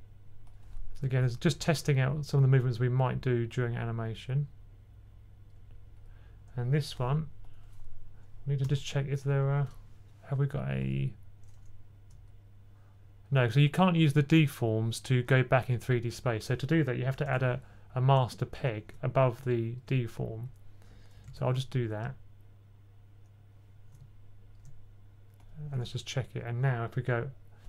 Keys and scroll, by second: 9.1 b, 17.1 super+p, 21.1 super+p.